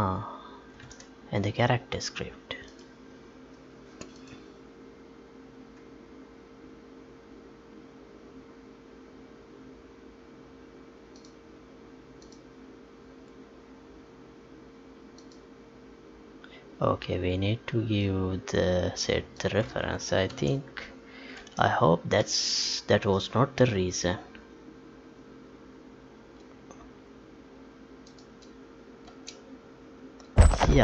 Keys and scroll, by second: 1.0 Tab, 20.3 ctrl+s, 21.4 ctrl+p, 29.0 space.